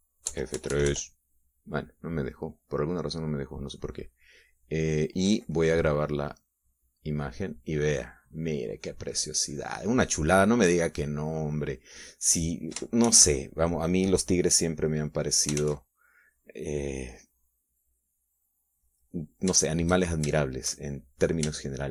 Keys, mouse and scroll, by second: 1.7 F3, 2.9 click, 4.8 click, 8.2 click, 10.7-13.3 drag, 14.5 shift+z, 16.3 middle click, 17.0 shift+z, 19.8 click, 20.4 middle click, 21.1-21.9 shift+drag.